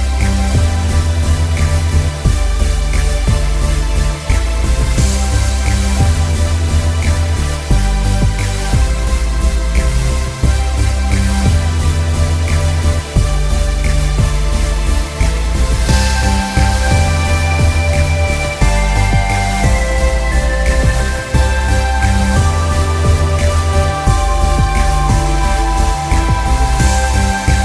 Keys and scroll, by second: 13.6 b.